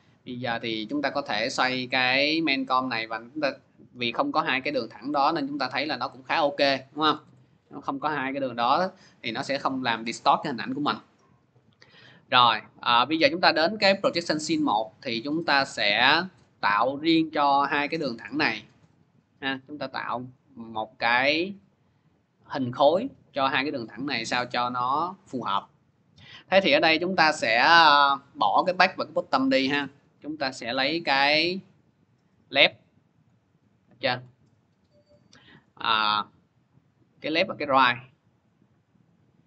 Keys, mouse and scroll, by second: 4.1 c, 6.4-8.9 drag, 7.0 ctrl+z, 13.6 click, 14.9-25.2 drag, 26.8 click, 28.5 click, 29.5 click, 32.0 click, 33.4-34.2 scroll, 34.5 click, 34.5 scroll, 35.6 click, 37.3 click, 38.9 click.